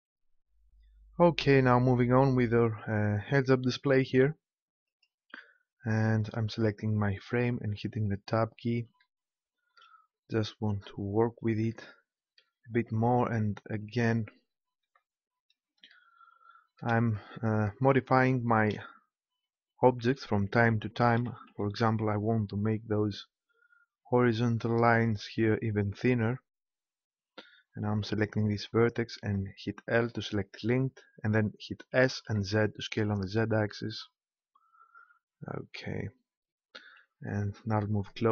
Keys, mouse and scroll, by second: 4.8-6.5 drag, 7.6 Tab, 14.8 l, 15.3 click, 21.2 s, 25.1-26.8 drag, 27.8-29.9 right drag, 29.3 l, 31.9 s, 34.9-36.7 drag.